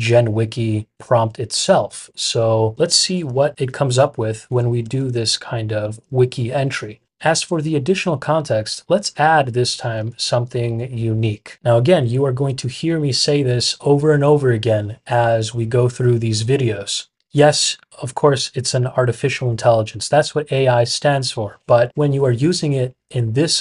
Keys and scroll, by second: 2.7 Escape, 3.2-5.6 typing, 3.5 Return, 3.8 Return, 5.8 Return.